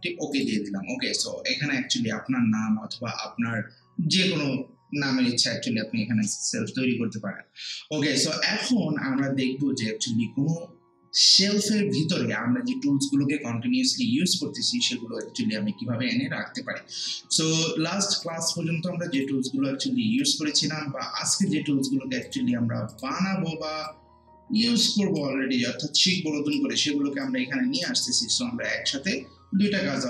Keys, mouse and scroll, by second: 0.3 click, 18.2-30.0 drag.